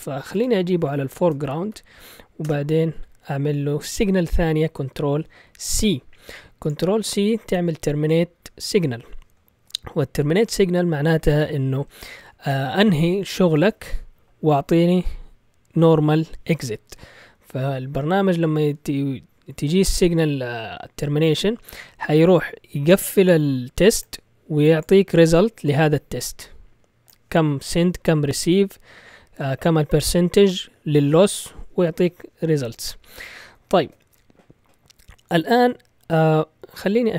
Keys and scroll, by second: 0.0-1.6 typing, 2.4 Return, 3.9 ctrl+c, 33.7 ctrl+l.